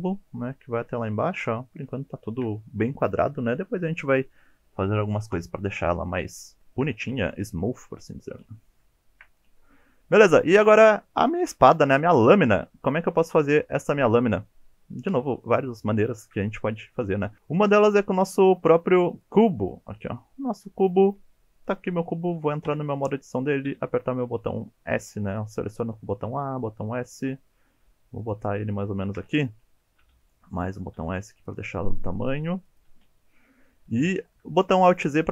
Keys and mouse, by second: 2.1 shift+middle drag, 6.6 shift+middle drag, 6.6 shift+KP_1, 8.0 shift+middle drag, 8.8 shift+middle drag, 9.8 shift+middle drag, 13.6-14.0 shift+middle drag, 17.3 shift+Delete, 17.5 shift+a, 22.7 Tab, 23.7 s, 26.4 s, 27.0 click, 27.2 g, 28.2 click, 29.0 shift+middle click, 30.0 s, 30.6 click, 30.9 s, 31.4 click, 31.6 g, 32.7 click, 34.6 alt+z, 35.0 click.